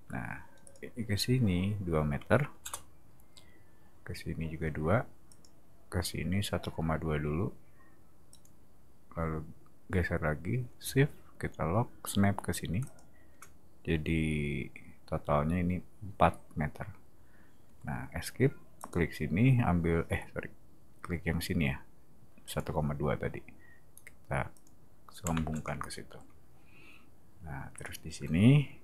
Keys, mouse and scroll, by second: 0.6 click, 2.5 2, 2.6 Return, 5.3 click, 8.3 click, 12.8 shift+click, 18.8 click, 22.4 click, 24.5 click, 25.3 space, 27.8 click.